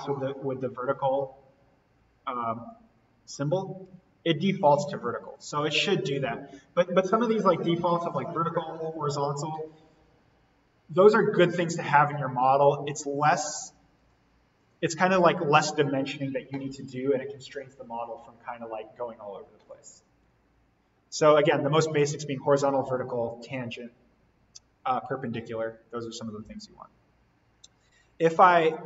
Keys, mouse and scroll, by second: 1.0 click, 3.8 Escape, 5.3 click, 6.8 Delete, 11.4 click, 14.7 click, 21.0-21.5 scroll up 1, 24.3-25.4 scroll up 1, 25.4-26.0 scroll down 1, 27.3-27.7 scroll up 1.